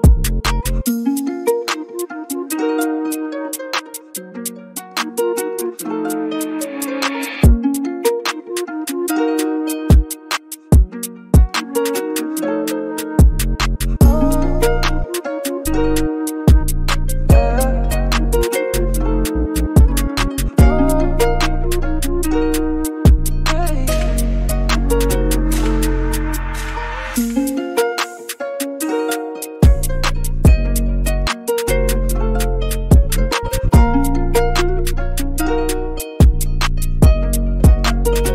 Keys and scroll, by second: 0.8 super+z, 1.1 typing, 33.8 typing.